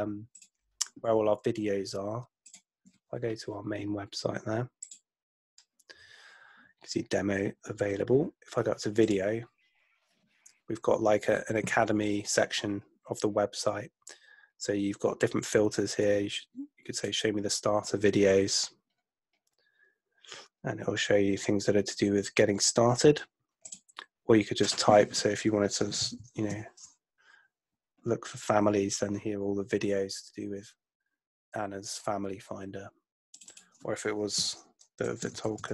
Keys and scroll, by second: 25.6-27.0 typing, 34.4-35.7 typing.